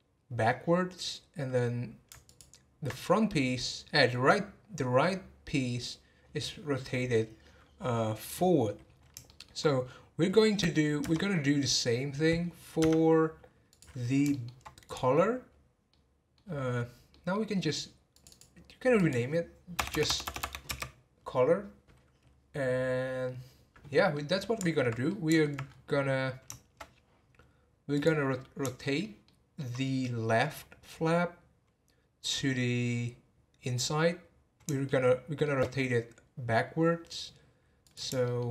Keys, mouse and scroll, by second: 2.2 alt+click, 8.5-8.9 scroll down 11, 9.2 shift+middle click, 9.8-11.0 scroll up 5, 12.8 Tab, 13.7 click, 14.3-14.8 shift+middle drag, 14.8 click, 15.9-16.4 middle drag, 16.4 scroll down 1, 17.1-18.1 middle drag, 18.1 click, 18.2-19.9 drag, 19.9 BackSpace, 20.0 BackSpace, 24.1-25.6 middle drag, 25.6-27.9 scroll up 10, 27.9 click, 28.3-28.8 scroll down 5, 28.8-32.3 shift+middle drag, 34.8-37.9 shift+middle drag, 37.9 click, 38.2 shift+middle click.